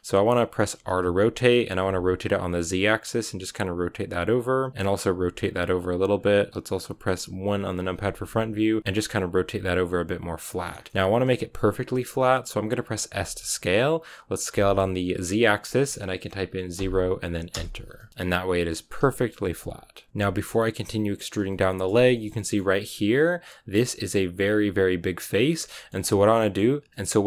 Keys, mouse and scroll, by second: 0.6 r, 5.0 r, 7.5 KP_1, 8.7 r, 9.2 r, 10.8-13.0 shift+middle drag, 13.0 s, 17.9 scroll down 4, 18.1-18.9 scroll up 3, 18.9 KP_3, 20.1 scroll up 1, 20.1-21.1 shift+middle drag, 21.1 scroll down 1, 21.4-23.6 shift+middle drag, 23.6-24.9 right drag, 25.3 shift+right click, 25.5 middle click, 26.1 scroll down 2, 26.2 middle click, 26.8-27.2 scroll up 1.